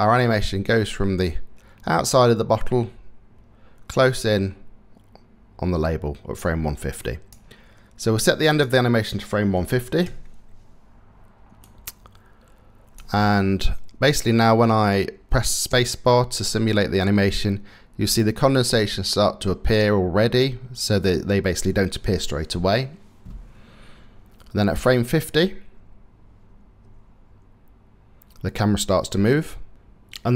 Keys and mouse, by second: 3.6-4.9 middle drag, 4.9 click, 6.8 click, 8.2-9.7 drag, 11.4-12.6 middle drag, 15.3 space.